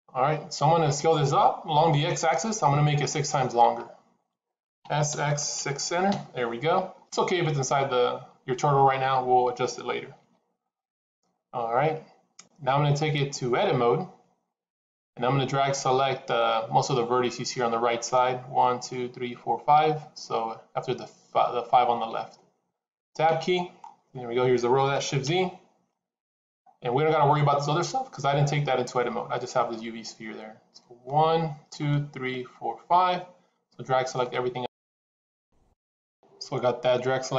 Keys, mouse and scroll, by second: 4.8 s, 6.8 scroll down 1, 7.8-8.2 scroll down 2, 10.0 scroll down 3, 23.2 Tab, 23.7-24.9 scroll up 2, 26.0 shift+z, 34.0 click, 35.8 click.